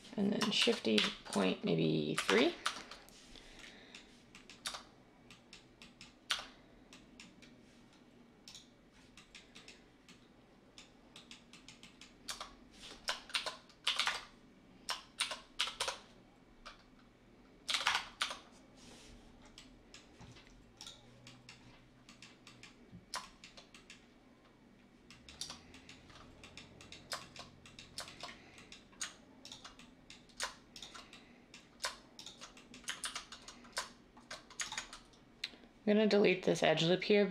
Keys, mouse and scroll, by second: 0.3-3.4 typing, 4.6 Tab, 6.2 Tab, 12.2 Tab, 13.3-14.0 typing, 15.2-16.1 typing, 17.6-18.3 typing, 25.4 Tab, 33.0 ctrl+z.